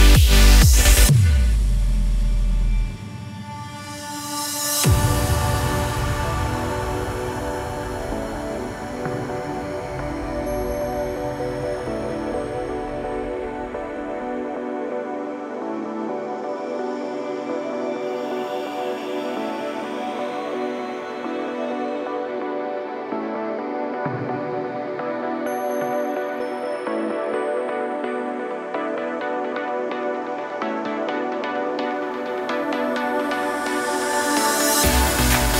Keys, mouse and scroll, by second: 0.3 click, 1.5 click, 3.2 click, 3.5 click, 4.5 s, 6.0 click, 7.1 click, 8.4 shift+a, 12.0 click, 12.5 click, 14.0 click, 15.5 click, 17.2 click, 18.3 ctrl+z, 19.2 click, 20.0 ctrl+z, 20.3 click, 23.0 s, 24.1 KP_0, 25.2 click, 26.6 click, 28.3 s, 29.1 click, 31.7-32.0 scroll up 1, 32.3 click, 32.9 s, 34.0 click, 35.1 click.